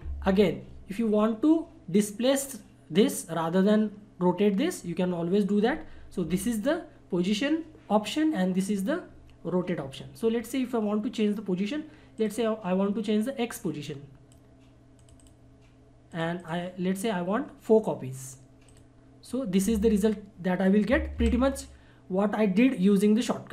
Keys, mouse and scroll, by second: 12.2-16.8 drag, 18.7 click, 21.1 ctrl+z.